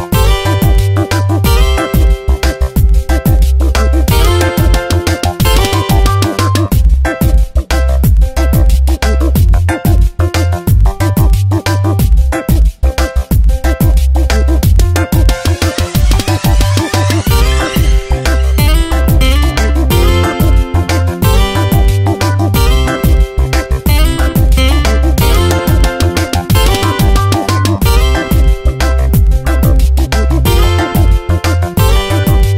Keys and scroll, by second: 10.9 space, 12.5 Return, 18.1 space, 20.9 p, 21.5 space, 24.4 ctrl+z, 25.4 space, 27.4 space, 29.4 space, 31.6 space.